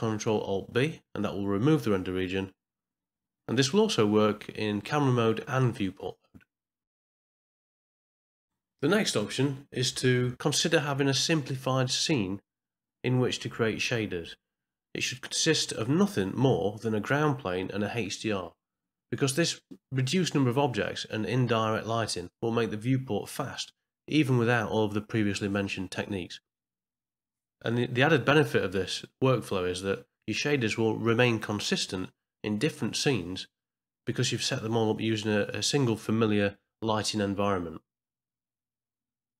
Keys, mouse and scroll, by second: 1.7 ctrl+alt+b, 12.5 KP_0, 13.6-14.9 middle drag, 15.4 click, 15.8-16.9 middle drag, 19.0 ctrl+c, 22.4 ctrl+v, 23.5 click, 24.2 KP_0, 25.8 click, 28.6 ctrl+c, 30.8 x, 32.2 ctrl+v, 33.4 middle click, 34.4 ctrl+middle click.